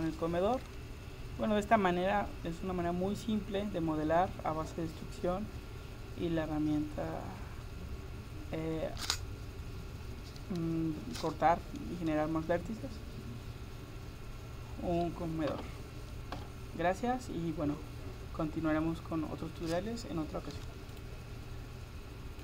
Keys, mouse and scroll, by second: 2.4 middle click.